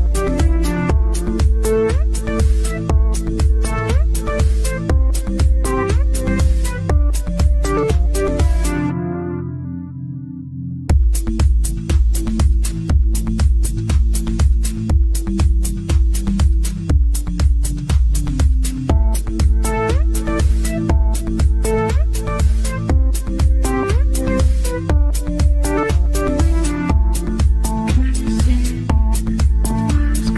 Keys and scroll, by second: 2.1 Delete, 9.9 Escape, 11.2 Delete.